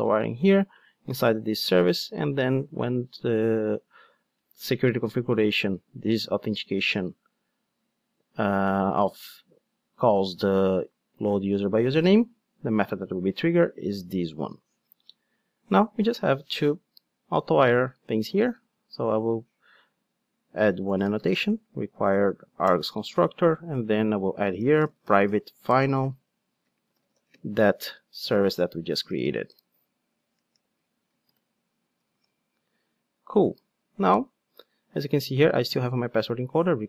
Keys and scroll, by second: 22.7 Return, 30.8 Return, 32.1 alt+super+l.